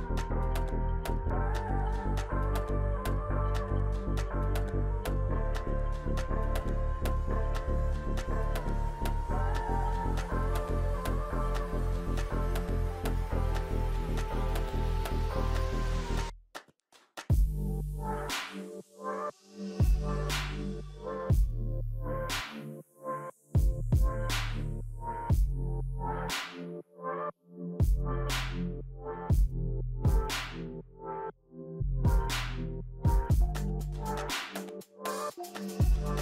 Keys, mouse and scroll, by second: 13.7 0, 13.9 Return, 14.6 0, 19.8 1, 20.2 Return, 25.7-26.7 typing, 34.6 1, 34.8 Return.